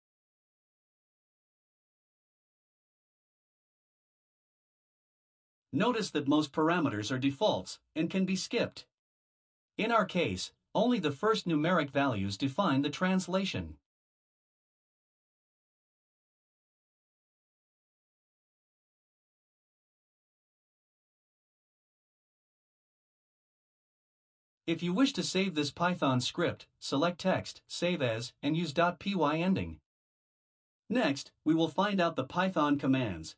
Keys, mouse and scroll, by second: 0.6 click, 1.9 click, 2.9 click, 5.9 click, 7.7 BackSpace, 9.6 click, 11.2 BackSpace, 12.7 click, 15.7 BackSpace, 20.0 click, 21.0 click, 22.0 click, 22.8 click, 28.1 click.